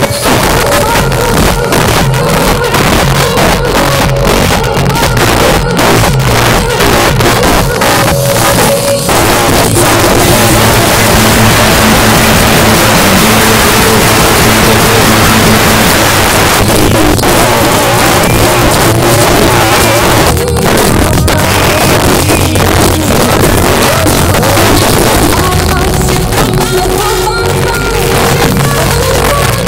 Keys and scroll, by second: 15.9 Page_Down.